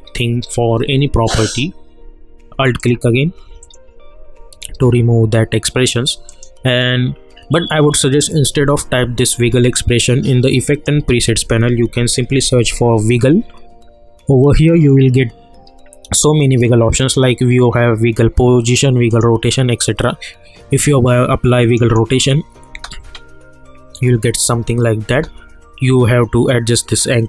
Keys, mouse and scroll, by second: 2.5 space, 2.8 alt+click, 6.2 click, 10.7 click, 11.1 ctrl+a, 11.5-13.1 typing, 14.8 click, 17.0 click, 21.6 click, 22.7 space, 25.1 space.